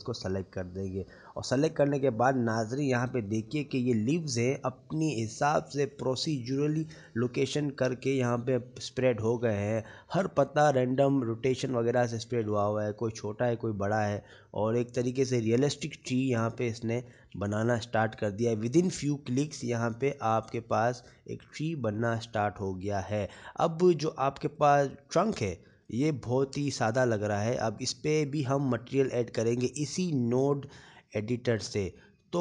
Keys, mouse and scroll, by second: 4.4 middle click, 6.7 shift+middle click, 9.8 shift+middle click, 11.0 middle click, 11.7 middle click, 13.6 shift+middle click, 14.6-15.0 scroll up 4, 16.1 middle click, 18.1-18.5 scroll down 6, 19.0 shift+middle click, 19.0 scroll down 1, 19.6-20.0 scroll up 5, 21.6 click, 22.9-23.6 scroll down 6, 23.6 middle click, 26.2-26.6 scroll up 3, 26.7 shift+middle click, 27.2-27.7 scroll up 2, 27.9 click.